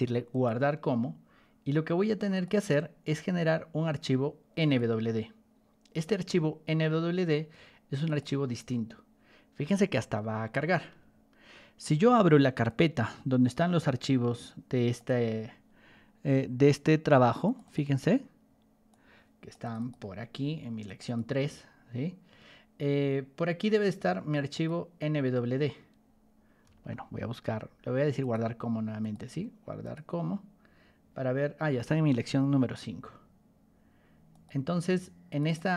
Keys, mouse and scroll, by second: 0.2 click, 2.3 click, 4.5 click, 8.0 click, 12.6 click, 14.9 click, 17.4 click, 17.6 click, 18.8 click, 19.6 click, 19.7 click, 20.8 click, 21.0 click, 24.5 click, 28.1 click, 28.9 click, 29.8 click, 31.8 alt+Tab, 34.2 click, 35.2 click, 35.4 click.